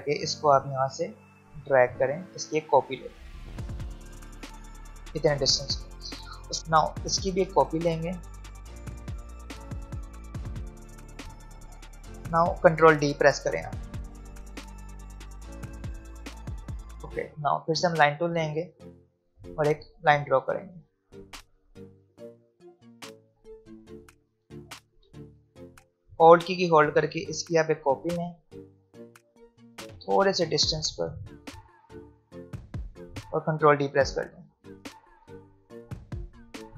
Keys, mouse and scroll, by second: 1.8-5.9 alt+drag, 8.2-10.7 alt+drag, 13.8 ctrl+d, 17.3 v, 19.6 click, 22.2-24.9 drag, 24.9 v, 26.9-33.1 alt+drag, 34.2 ctrl+d.